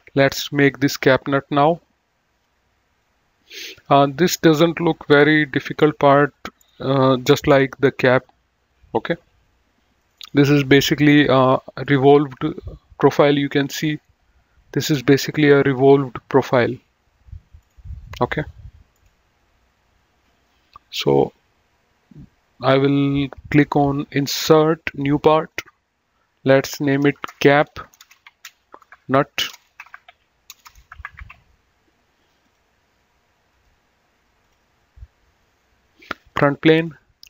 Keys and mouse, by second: 1.3 click, 22.5 click, 23.9 click, 26.7 F2, 27.1-31.8 typing, 32.4 click, 33.5 right click, 34.3 click, 36.6 click.